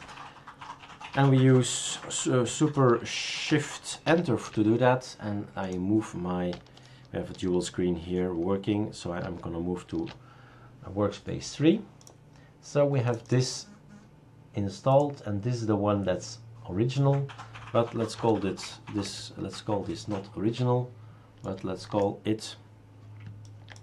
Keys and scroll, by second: 4.0 shift+super+Return, 9.2 super+3, 18.2 F2, 19.0 Right.